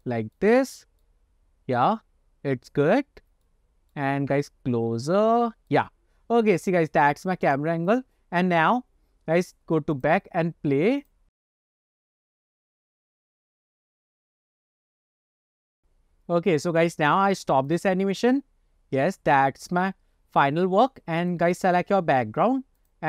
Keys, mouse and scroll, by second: 0.1-0.5 shift+middle drag, 0.6-1.2 middle drag, 1.3-2.0 scroll up 2, 2.1-2.7 scroll down 1, 3.5 shift+middle click, 4.3 scroll down 1, 5.1 shift+middle click, 7.5 click, 8.0 click, 10.0-10.8 drag, 11.1 click, 18.6 click, 19.5 scroll up 1, 21.3 click, 22.9 click.